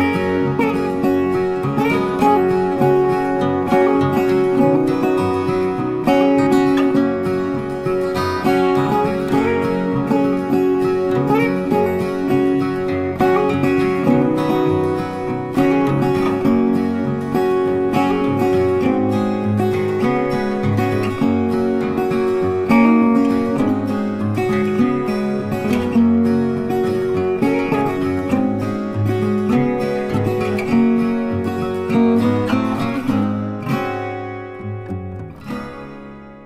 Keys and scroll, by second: 26.7 ctrl+t.